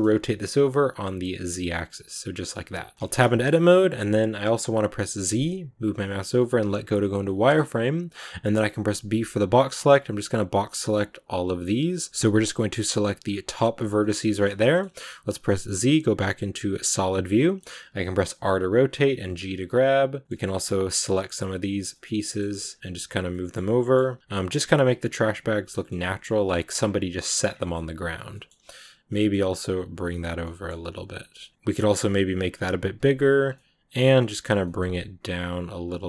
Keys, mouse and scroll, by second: 2.4 middle click, 2.9 scroll up 2, 2.9 Tab, 3.1-6.5 shift+middle drag, 6.5 z, 6.9-11.2 middle drag, 11.2 b, 12.1 ctrl+shift+z, 13.1 b, 13.9-16.7 middle drag, 16.7 z, 16.9-18.0 middle drag, 18.0 r, 20.2 middle click, 20.3 g, 20.8 right click, 21.1 g, 21.8 middle click, 22.3 g, 23.1 scroll down 1, 23.1 middle click, 23.5-24.1 scroll up 1, 24.1 right click, 24.3 g, 25.1 right click, 25.2 g, 25.6 middle click, 25.8 g, 27.4 middle click, 27.6 scroll down 2, 28.0 right click, 28.2 middle click, 28.6 right click, 29.0 middle click, 29.5 g, 30.3 middle click, 30.9 right click, 31.1 g, 31.5 middle click, 31.9 g, 32.8 right click, 32.9 g, 33.3 scroll down 1, 33.4 middle click, 34.3 scroll up 2, 34.5 middle click, 34.8 g.